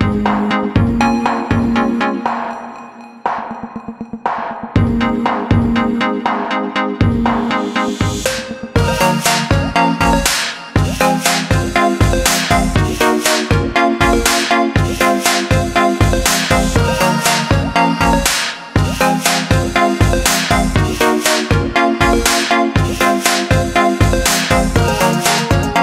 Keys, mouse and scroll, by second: 2.7 click, 12.6-15.7 middle drag, 16.6 click, 19.7-22.8 middle drag, 23.1-24.6 middle drag, 24.6-25.8 drag.